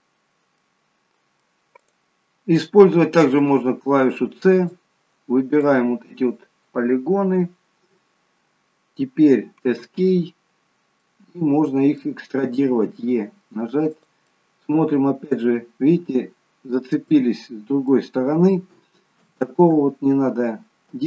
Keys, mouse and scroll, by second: 0.6 middle click, 1.9 click, 3.4 c, 11.0 middle click, 12.8 e, 14.5 middle click, 17.3 middle click, 19.2 ctrl+z.